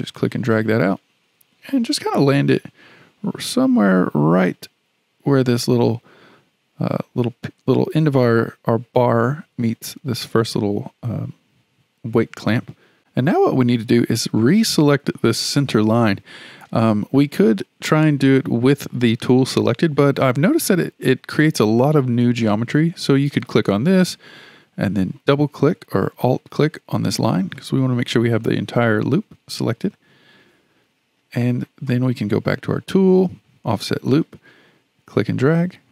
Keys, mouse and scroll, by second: 23.3-26.1 drag, 26.3 click, 27.6-29.3 middle drag, 29.3-30.1 scroll up 4, 30.1 scroll down 4, 30.9 KP_1, 34.1-35.9 drag.